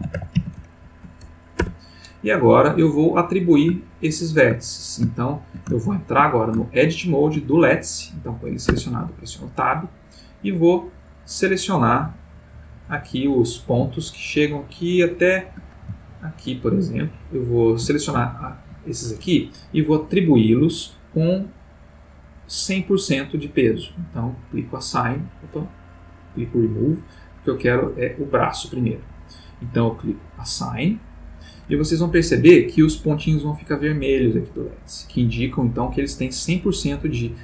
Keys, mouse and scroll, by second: 0.0-0.7 typing, 1.6 Return, 3.7-4.7 ctrl+middle drag, 5.1-5.8 shift+middle drag, 8.0 click, 8.9 Tab, 10.0-13.5 drag, 14.0-15.7 shift+middle drag, 16.2-18.0 shift+drag, 18.2 ctrl+shift+middle click, 21.4-23.5 drag, 24.5 click, 26.4 click, 28.0 click, 30.5 click, 31.8 ctrl+middle click.